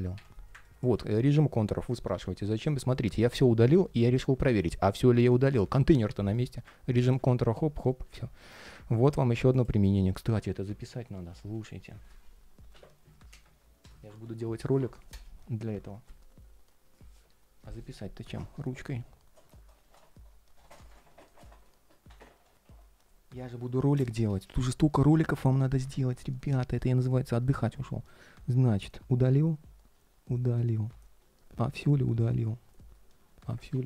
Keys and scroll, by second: 2.5 ctrl+shift+3, 4.2 ctrl+shift+3, 6.2 ctrl+shift+3, 8.1 ctrl+shift+3.